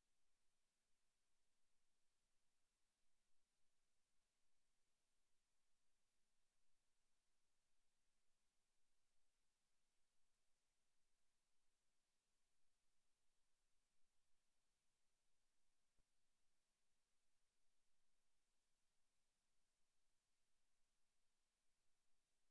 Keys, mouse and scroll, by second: 0.9 Tab, 1.5 Tab, 1.7 z, 3.9 click, 5.5 click, 7.8 click, 10.9 click, 13.8 click, 17.9 middle click, 20.7 click.